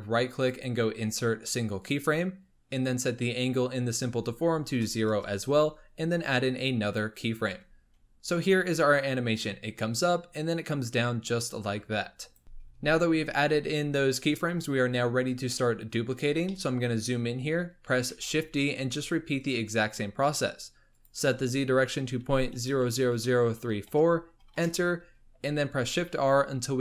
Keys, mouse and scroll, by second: 0.3-3.3 right drag, 3.3-6.4 drag, 6.8 click, 8.4 click, 15.9 scroll up 2, 16.4 shift+middle click, 17.1-18.1 scroll up 10, 18.1 shift+d, 20.8-22.8 drag, 22.8 KP_0, 26.0-26.8 typing.